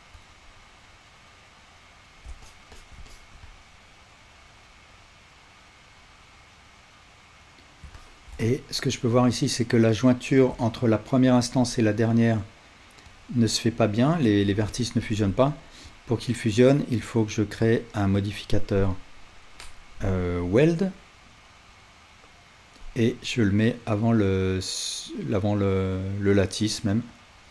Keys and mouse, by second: 26.7-27.5 drag, 26.7-27.5 right drag.